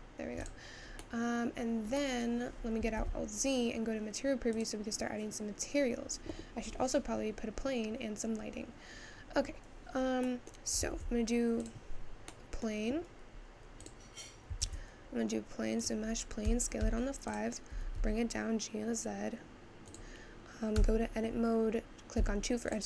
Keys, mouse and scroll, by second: 0.9 scroll down 1, 1.2 middle click, 1.6 scroll down 1, 2.0-3.0 middle drag, 3.0 alt+z, 3.2-6.3 scroll down 4, 8.2 click, 8.3-8.9 scroll down 10, 8.9-9.8 scroll down 1, 9.8 scroll down 4, 10.1 scroll up 1, 10.5-12.1 middle drag, 12.1-12.4 scroll down 1, 12.4-13.9 middle drag, 13.9 click, 15.9 shift+a, 16.5 s, 21.0 Tab, 22.7 click.